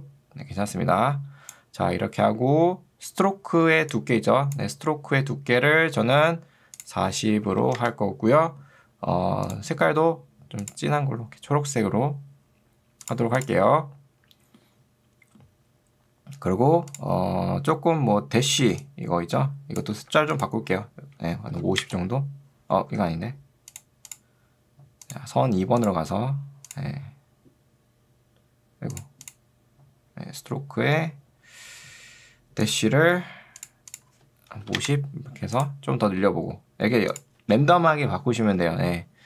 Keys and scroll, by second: 3.7 ctrl+2, 6.1 Escape, 7.3-8.2 typing, 18.7 ctrl+2, 20.1 Escape, 21.5 5, 21.9 Return, 23.1 ctrl+z, 34.7 0, 34.9 Return.